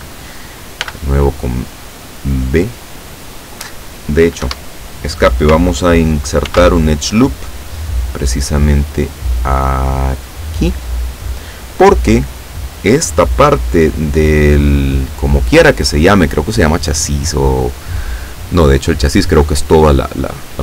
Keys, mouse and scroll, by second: 0.9 b, 4.5 Escape, 6.6 ctrl+r, 7.6 click, 10.6 click.